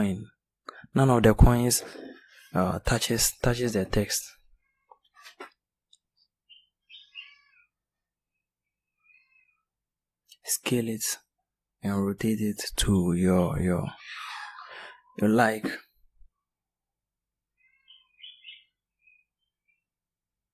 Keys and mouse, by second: 0.0-0.7 middle drag, 9.1 r, 14.1 s, 17.7 middle click, 18.1-18.7 middle drag.